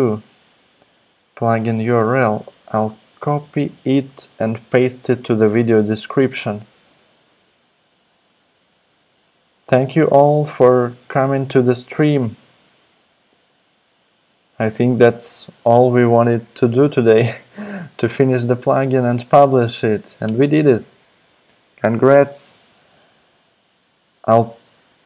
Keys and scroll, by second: 5.5 super+c, 12.2 r, 20.3 alt+super+Left.